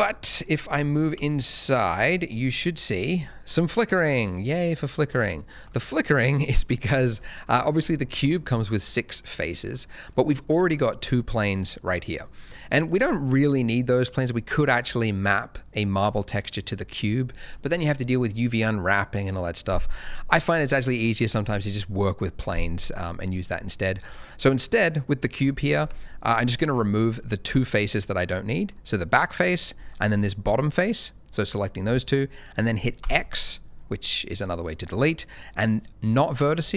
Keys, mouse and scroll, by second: 0.2 Tab, 1.1 shift+middle click, 1.5 scroll down 1, 1.7 shift+middle click, 1.9-2.3 shift+scroll up 2, 2.3 middle click, 3.3 shift+middle click, 3.7 middle click, 5.3 shift+middle click, 6.6 scroll down 1, 7.2 middle click, 9.5 z, 10.0 middle click, 10.4 click, 10.8 double click, 11.7 click, 12.1 double click, 12.7 click, 16.6 click, 22.8 scroll up 1, 23.5-24.1 scroll down 1, 24.1 middle click, 25.8 Tab, 26.3 click, 27.1 shift+click, 28.0 click, 28.4 middle click, 29.7 shift+click, 30.1 shift+middle click, 30.3 click, 33.0 x.